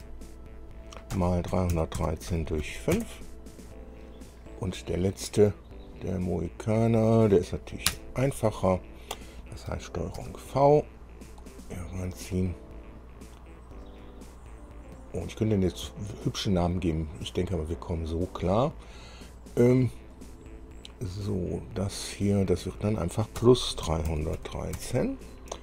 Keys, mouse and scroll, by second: 0.1 KP_4, 1.3 KP_Multiply, 1.7 KP_3, 1.9 KP_1, 2.1 KP_3, 2.5 KP_Divide, 2.8 KP_5, 3.1 KP_Enter, 7.2 click, 8.1 Return, 10.3 ctrl+v, 10.9 ctrl+scroll down 3, 11.7-13.0 drag, 14.0 click, 18.5 click, 20.3 click, 22.0 click, 22.7 click, 23.6 KP_Add, 24.3 KP_3, 24.3 KP_1, 24.5 KP_3.